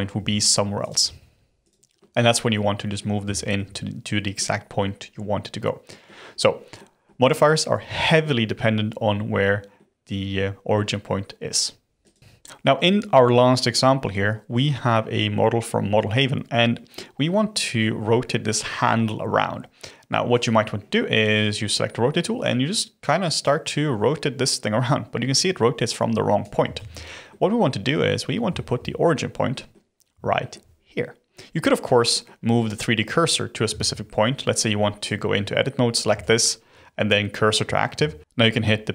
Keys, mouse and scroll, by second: 0.1 g, 0.9 g, 1.9-3.7 middle drag, 3.7-4.5 scroll up 1, 5.8-12.0 middle drag, 12.0 click, 12.1-13.5 middle drag, 17.8-20.3 middle drag, 20.3 click, 23.4 click, 26.8 ctrl+z, 27.2-28.1 middle drag, 28.1 scroll up 2, 28.5-28.8 shift+middle drag, 28.8-29.5 scroll up 5, 29.5-30.1 middle drag, 30.1 scroll up 1, 30.3-31.2 shift+middle drag, 31.2-32.1 scroll down 6, 32.1 middle click, 32.4-32.8 scroll up 3, 33.7 Tab, 35.0 click, 36.1 shift+s, 37.9 Tab, 38.2 scroll down 1, 38.4 ..